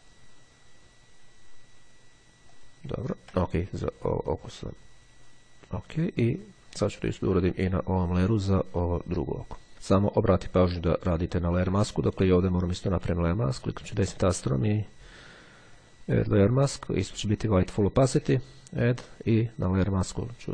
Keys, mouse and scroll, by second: 0.1 click, 2.6 click, 3.8-4.5 scroll down 2, 4.5-5.2 scroll up 2, 5.2 shift+scroll up 1, 5.4-6.8 shift+scroll down 1, 6.8-7.3 shift+scroll up 1, 8.6 click, 9.7 ctrl+z, 11.0 click, 11.7-13.1 drag, 15.9 click, 18.3 click, 19.8 click.